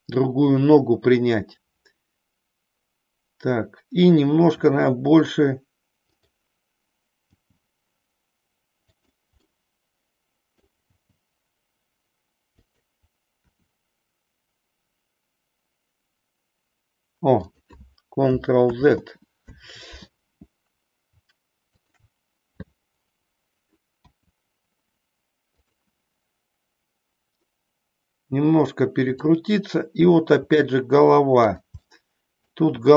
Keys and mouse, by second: 4.6 r, 6.1 click, 7.3 g, 9.5-10.6 middle drag, 10.9 g, 12.7 click, 13.3 r, 17.5 click, 18.7 ctrl+z, 21.7 shift+click, 24.0 r, 25.6 click, 30.3 r, 31.5 click, 31.7 middle click, 32.7 r.